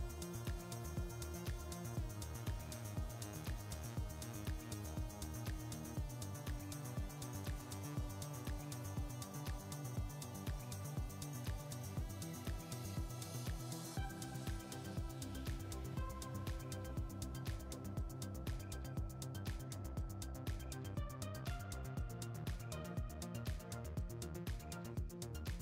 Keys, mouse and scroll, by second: 0.1-2.1 scroll up 2, 2.1-5.8 shift+middle drag, 5.8 ctrl+alt+KP_0, 11.0 g, 20.4 g.